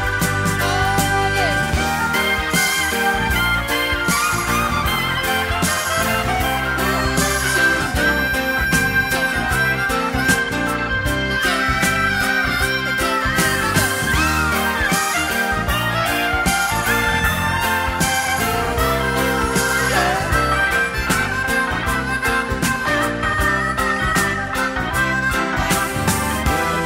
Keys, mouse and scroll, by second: 4.9-7.6 right drag, 7.6-9.0 middle drag, 10.6-11.6 right drag, 10.7 Delete, 11.6 middle click, 11.7-14.7 right drag, 13.0 e, 13.5 z, 14.7-15.2 middle drag, 14.8 right click, 15.2-16.0 right drag, 16.0-16.5 middle drag, 16.5 right drag, 16.6-17.1 middle drag, 17.1-18.1 right drag, 18.1 middle click, 18.2-19.1 right drag, 19.1-21.4 middle drag, 20.8 Tab, 21.4-23.5 right drag, 23.4 3, 24.2 alt+middle click, 24.3 alt+right click, 26.6-26.8 right drag, 26.6 s.